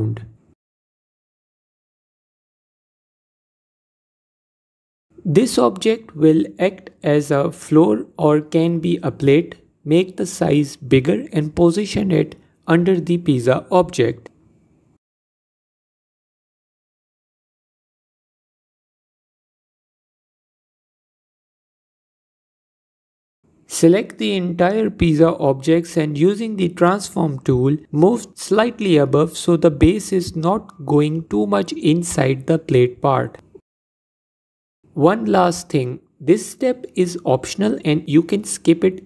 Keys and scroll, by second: 11.2 s, 24.2 s, 29.4 ctrl+z.